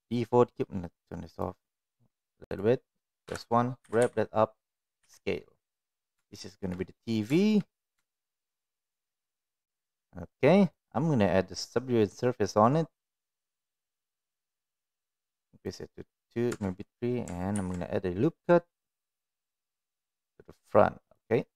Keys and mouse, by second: 0.0 click, 2.4 click, 3.2 KP_1, 3.8 g, 5.0 s, 6.3 shift+middle drag, 6.8-7.1 middle drag, 7.4 shift+middle click, 8.0 shift+middle click, 8.3-9.1 middle drag, 10.7-13.8 drag, 16.5 Tab, 17.5 ctrl+r.